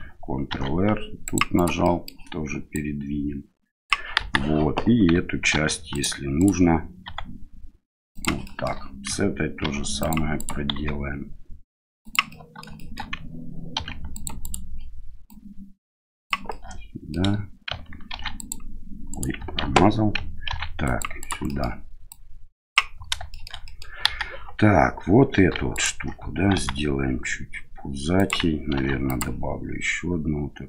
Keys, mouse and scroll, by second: 0.5 ctrl+r, 1.9 middle click, 2.7-3.9 drag, 4.2 KP_1, 5.5 ctrl+r, 7.0 s, 8.5 shift+middle click, 9.6 ctrl+r, 10.7 s, 12.3 middle click, 12.8 shift+middle click, 13.7 ctrl+r, 15.3 click, 16.5 middle click, 18.1 ctrl+r, 19.6 ctrl+z, 20.5 ctrl+r, 21.5 middle click, 22.1 click, 23.3 middle click, 23.7 middle click, 24.0 KP_1, 25.7 alt+right click, 26.5 s, 28.7 ctrl+r.